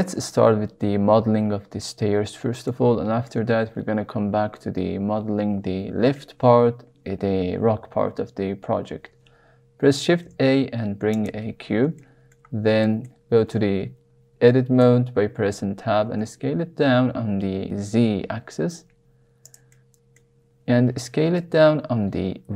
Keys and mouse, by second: 2.8 shift+middle click, 10.1 shift+a, 12.0 shift+middle click, 12.8-13.2 shift+middle drag, 14.7 Tab, 15.9 s, 16.1 z, 19.4 click, 19.7 middle click, 20.7 s, 21.4 y.